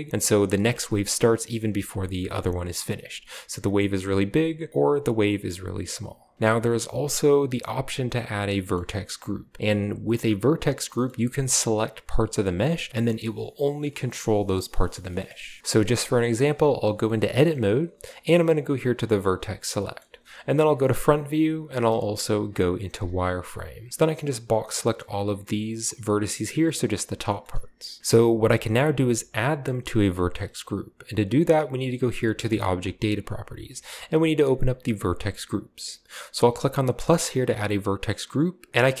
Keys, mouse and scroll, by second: 2.0-2.7 middle drag, 2.7-3.5 scroll up 1, 3.8-5.0 middle drag, 4.7-6.3 drag, 6.3 ctrl+b, 6.3 space, 10.7 space, 11.2 Tab, 12.7-13.1 scroll up 1, 14.9-15.6 scroll down 1, 15.6 ctrl+alt+Left, 15.6 middle click, 16.4 middle click, 17.4-18.5 shift+middle drag, 19.2 click, 19.8-20.9 middle drag, 20.9 KP_1, 21.9-23.2 typing, 23.9-25.5 drag, 27.4-28.0 scroll up 1, 32.5 click, 33.6 click, 35.0 click, 37.0 click, 38.7-39.0 typing.